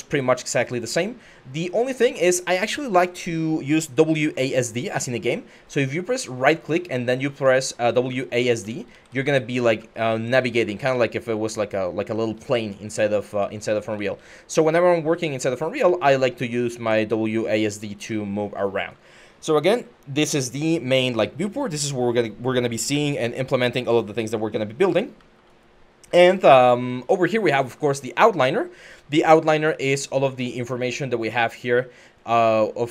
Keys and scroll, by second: 6.2-18.6 typing, 24.3-24.9 typing.